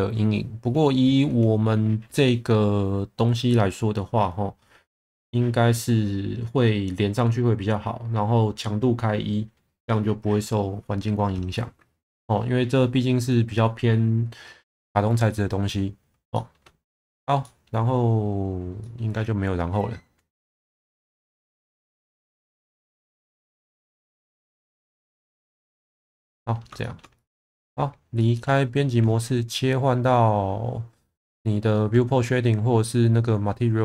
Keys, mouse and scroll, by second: 17.5 middle click, 25.5 click, 26.8 shift+middle click, 27.4 Tab, 28.2 shift+middle drag.